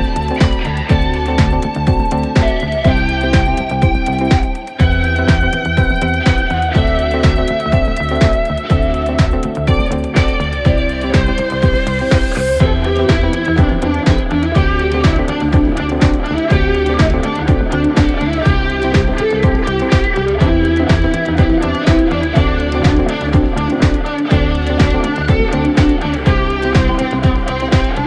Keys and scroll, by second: 5.2 ctrl+z, 5.9 ctrl+z, 9.2 ], 15.6 ctrl+z, 18.9 Escape, 19.5 4, 21.4 3, 24.4 4.